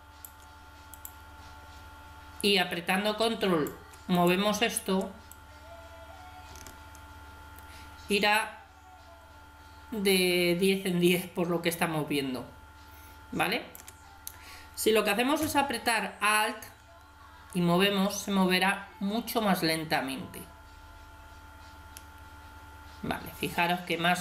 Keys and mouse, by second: 2.9-7.0 drag, 16.4-18.1 drag.